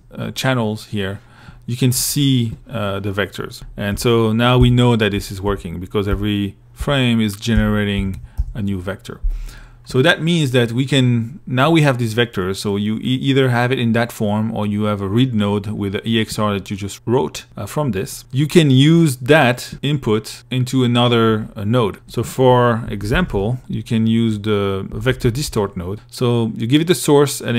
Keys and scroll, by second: 1.2 i, 3.1 Right, 4.1 Right, 5.0 Right, 5.6 Right, 6.8 Left, 21.1 i, 22.1 Tab, 22.1-23.1 typing, 24.1 Down.